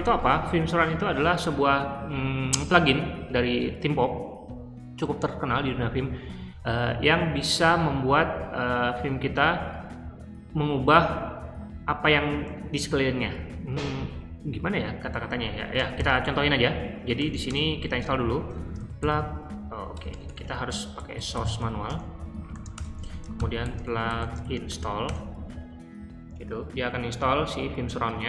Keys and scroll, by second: 15.4 Escape, 15.7-25.0 typing, 22.7 Return.